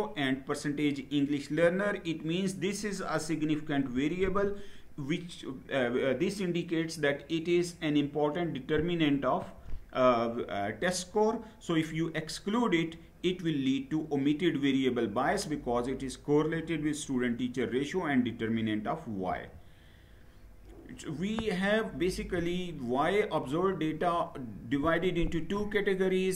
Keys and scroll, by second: 19.0 Down.